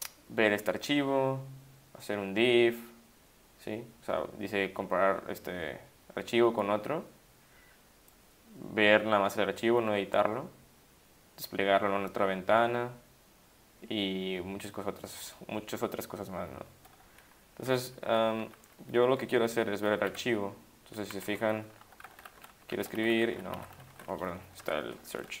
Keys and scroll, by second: 18.1 Escape, 20.1 v, 21.1 Down, 21.3 Down, 21.4 Down, 21.6 Down, 21.7 Down, 21.8-24.1 typing, 24.6 ctrl+g, 25.3 ctrl+g.